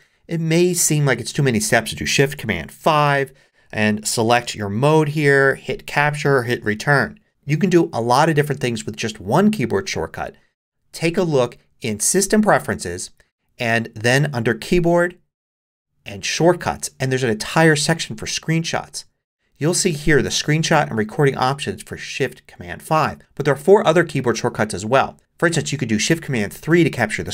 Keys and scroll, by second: 2.8 shift+super+5.